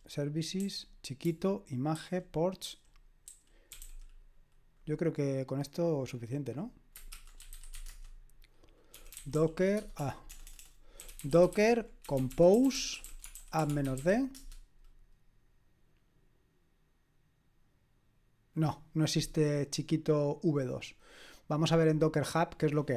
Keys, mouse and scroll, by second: 0.0-4.2 typing, 7.2-9.8 typing, 11.0-14.8 typing, 21.5 click, 22.3 click, 22.8-22.9 typing.